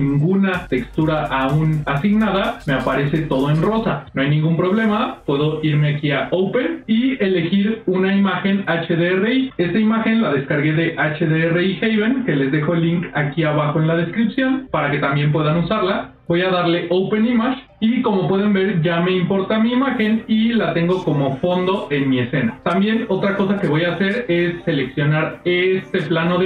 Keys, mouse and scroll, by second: 5.9 click, 18.6-20.0 middle drag, 23.9 middle click, 24.7 click, 25.4-26.4 middle drag.